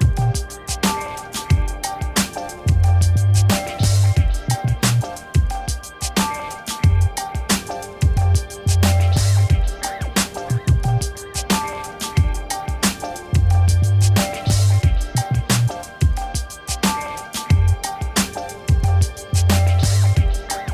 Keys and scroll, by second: 4.6 ctrl+-, 18.6 3, 18.8 0, 19.3 Return.